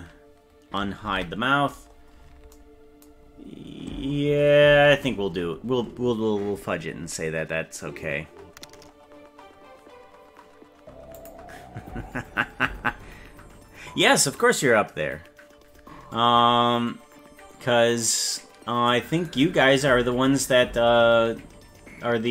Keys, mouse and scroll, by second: 1.0 alt+h, 1.6-2.5 scroll down 12, 3.2-3.5 scroll down 2, 3.9-4.5 scroll down 3, 4.8-5.7 scroll up 14, 19.5-20.0 scroll down 6.